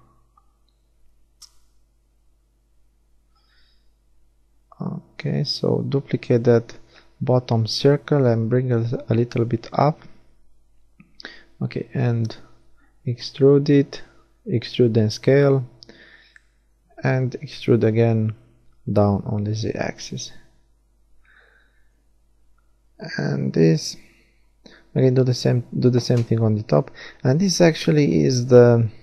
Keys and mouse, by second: 2.2-4.2 drag, 5.4 e, 6.7 click, 6.9 right click, 7.3 s, 8.5 click, 10.4 s, 11.9 KP_1, 12.7 s, 14.2 e, 16.8 click, 17.4 z, 18.1 middle click, 18.9 middle click, 20.9 KP_1, 22.4 z, 23.1 a, 23.4 b, 24.7 b, 26.0 shift+d, 27.5 click, 28.8 KP_1.